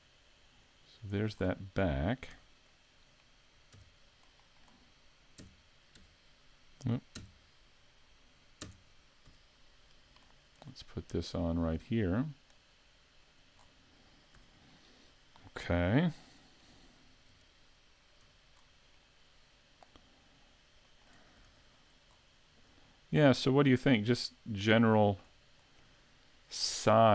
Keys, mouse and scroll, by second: 1.4 scroll down 2, 2.3 z, 2.7 middle click, 3.8 KP_8, 4.2 middle click, 5.4 KP_3, 6.0 KP_5, 6.2 KP_8, 7.2 KP_5, 8.6 KP_3, 9.4 z, 9.8-10.3 scroll up 2, 10.3 shift+middle click, 11.6 click, 13.6-14.4 scroll down 3, 14.4 a, 14.7 middle click, 16.2 shift+middle click, 17.3 KP_5, 18.2 z, 18.6 scroll down 1, 19.0 middle click, 20.4 scroll up 1, 20.9 shift+middle click, 21.5 s, 22.1-22.5 scroll up 2, 22.8 shift+middle click, 23.4 scroll up 2, 23.8 middle click, 24.9 shift+middle click.